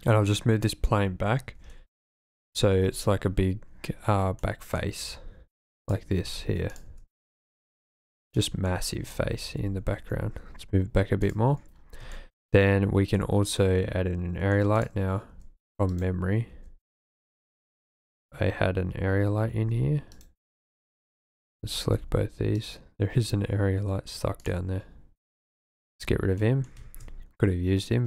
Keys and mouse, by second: 1.5 r, 1.7 x, 2.4 KP_9, 2.5 KP_0, 2.7 KP_Enter, 4.4 click, 5.0 s, 5.9 drag, 6.1 g, 6.3 z, 6.8 click, 6.9 s, 8.4 drag, 8.7-9.1 drag, 9.9 g, 10.0 y, 11.3 click, 12.1 shift+click, 13.1-14.6 drag, 14.8 click, 15.3 g, 15.9 click, 16.5 g, 17.2 click, 19.5 g, 20.1 click, 21.9 g, 22.6 drag, 24.4 click, 25.5 x, 26.4 click, 27.1 shift+a.